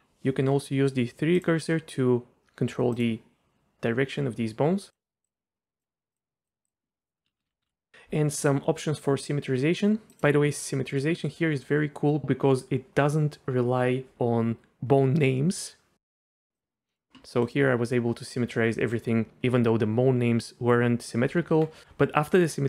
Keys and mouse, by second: 1.4-3.0 drag, 4.9-5.3 drag, 5.8 click, 7.3 ctrl+z, 7.4 ctrl+z, 7.5 ctrl+z, 7.6 ctrl+z, 10.1-16.6 drag, 16.9 middle click, 17.3 middle click, 21.4 Tab, 21.8 r.